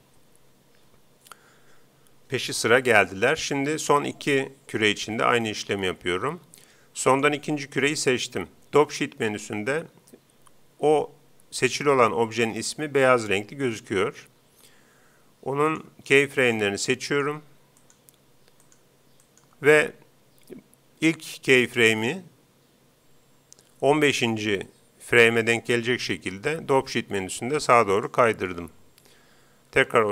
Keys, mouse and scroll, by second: 4.8 Escape, 7.1-8.8 right drag, 15.8-20.9 right drag, 24.6 g, 28.1-29.8 drag, 29.8 alt+a.